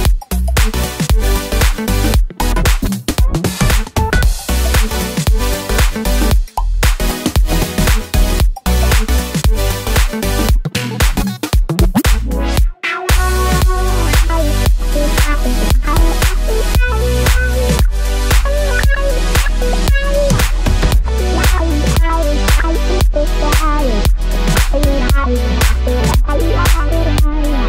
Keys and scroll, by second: 9.4 super+d.